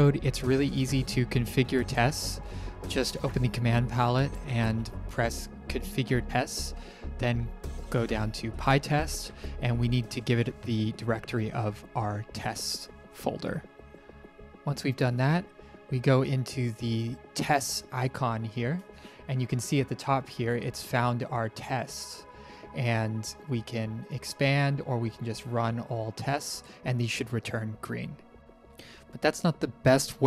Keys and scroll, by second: 0.6-2.2 typing, 5.9 Return, 9.6 Down, 9.8 Down, 11.2 Return, 13.6 ctrl+Print, 28.4 Print.